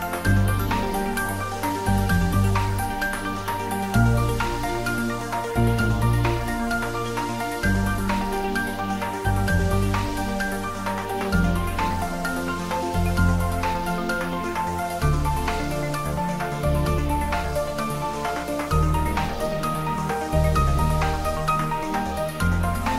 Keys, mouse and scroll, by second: 1.6 click, 2.4 right click, 3.1 click, 3.5-4.1 middle click, 4.3-4.8 scroll up 1, 5.6 click, 7.3 click, 8.1 Tab, 8.4 click, 11.3 3, 11.5 click, 12.3-15.3 middle drag, 15.5 scroll up 1, 17.0 3, 17.9-18.7 scroll down 1, 18.7 s, 19.5 click, 19.9 ctrl+z, 20.9 s, 21.6 click.